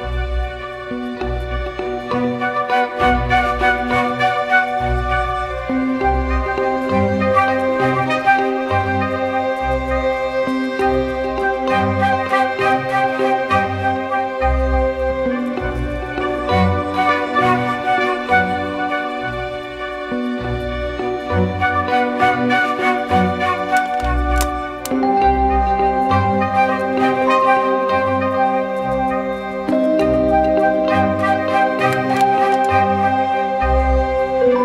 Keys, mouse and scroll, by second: 4.8 ctrl+-, 4.9 ctrl+-, 6.3 ctrl+=, 24.2-27.5 scroll up 1.